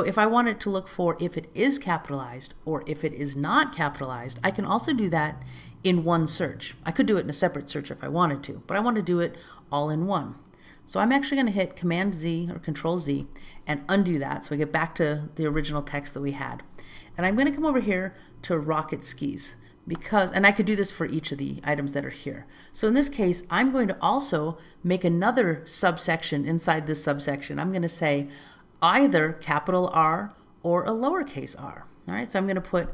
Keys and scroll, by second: 13.1 super+z, 17.3 alt+z.